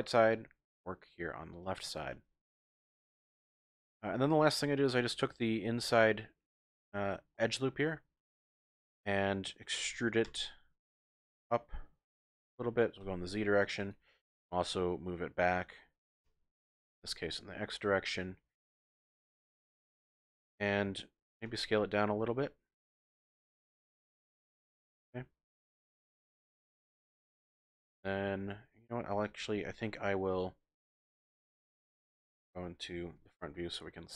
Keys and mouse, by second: 1.6 click, 1.8 middle click, 1.8 typing, 2.0 click, 2.1 Tab, 3.1 click, 4.2 2, 5.4 alt+click, 5.9 click, 6.3 middle click, 7.4-8.8 middle drag, 8.8 click, 10.3 e, 13.0 z, 13.8 click, 16.2 g, 16.7 x, 18.1 click, 18.9 click, 20.2 shift+click, 21.5 s, 24.1 click, 24.5-27.1 drag, 27.9-29.2 drag, 30.3 KP_3, 31.2 KP_1, 32.2 shift+click, 33.2 z.